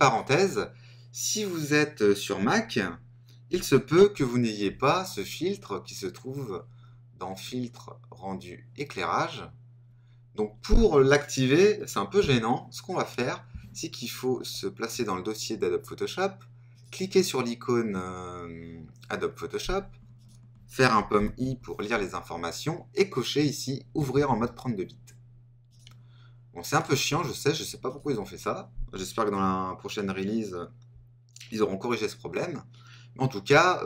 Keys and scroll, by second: 21.1 super+i.